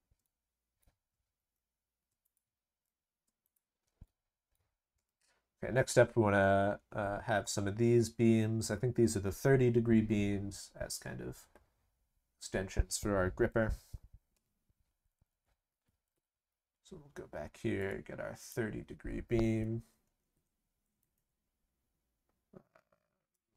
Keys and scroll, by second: 1.4 ctrl+v, 2.6 ctrl+v.